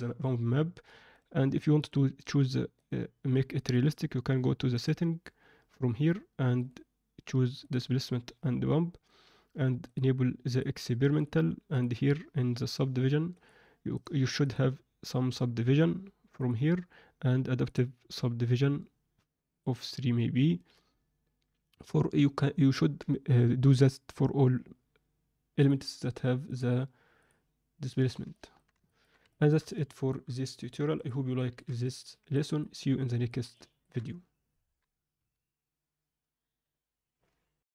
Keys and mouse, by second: 28.3 alt+middle click, 28.8 ctrl+alt+middle click, 29.2 shift+middle click, 29.8 ctrl+alt+middle drag, 30.9 click, 31.3 ctrl+alt+middle click, 31.8-32.3 middle drag, 32.6-33.2 middle drag, 33.5 ctrl+alt+middle click, 35.1 F10.